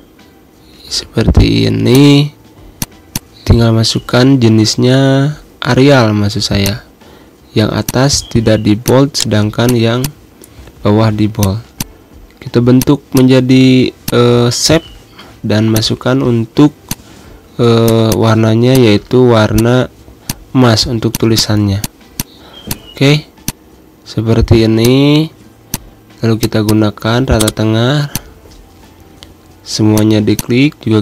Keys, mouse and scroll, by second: 0.0-0.2 typing, 0.6 ctrl+a, 1.7 click, 3.6-4.1 typing, 5.3 BackSpace, 6.4 click, 9.0 right click, 9.5 click, 9.6 z, 9.8 click, 10.2 space, 10.6 v, 11.2 click, 11.8 click, 13.1 click, 15.5 click, 16.3 g, 16.7-24.2 drag, 24.2 g, 24.6 shift+click, 25.5 click, 29.1 g, 29.8 shift+click.